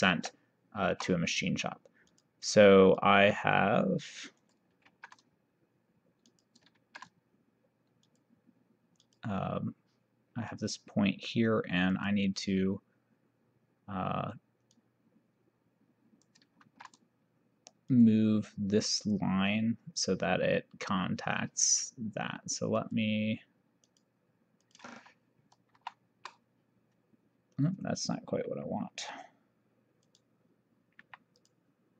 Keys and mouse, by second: 0.2 shift+o, 2.2 click, 4.5 click, 5.0 ctrl+z, 6.4 click, 6.8 ctrl+z, 8.1 click, 10.6 click, 12.0 click, 14.8 click, 16.8 ctrl+z, 18.0 click, 22.8 click, 24.0 click, 25.8 shift+o, 30.1 click, 31.4 click.